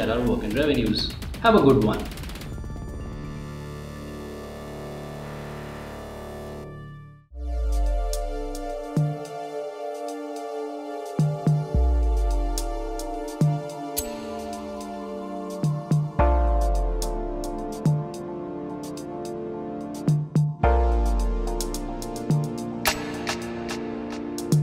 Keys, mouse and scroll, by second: 2.4 click, 2.4-3.6 typing, 2.8 click, 3.0 click, 3.2 click, 3.6 click, 4.1 middle click, 4.2 middle click, 4.3 click, 4.6 click, 4.8 click, 5.3 middle click, 5.9 click, 6.3 scroll up 1, 6.7 scroll down 1, 6.8 scroll up 1, 7.0 click, 7.1 click, 7.2 click, 11.9 click, 11.9 typing, 12.9 click, 14.4 click, 14.8 click, 15.3 click, 22.4 click, 22.6 click, 23.2 click, 23.5 click, 23.9 scroll down 1, 24.0 click, 24.1 click, 24.5 scroll up 1.